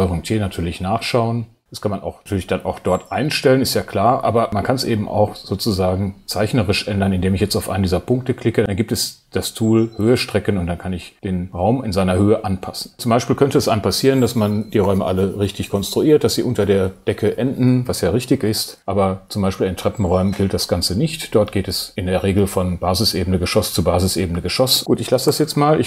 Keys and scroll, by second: 25.3 ⟲.